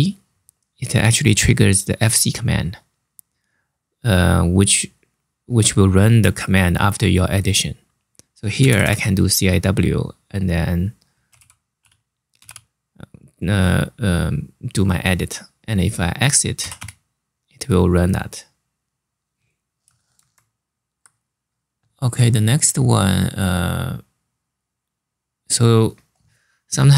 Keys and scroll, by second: 8.0-9.0 typing, 10.5-12.6 typing, 16.2-16.9 typing, 19.8 super+Tab.